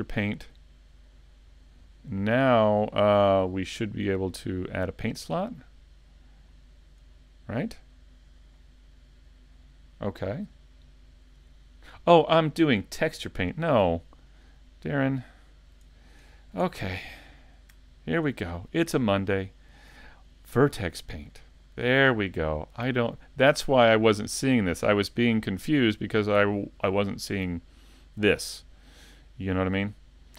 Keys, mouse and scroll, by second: 4.7 click, 10.0 scroll down 1, 10.8 shift+middle click, 10.8 scroll down 1, 14.3 click, 15.9 shift+middle click, 16.3-16.9 scroll up 3, 16.7 shift+middle click, 19.2 click, 21.6 scroll down 2, 22.1 middle click, 22.8 scroll up 2, 29.7 click.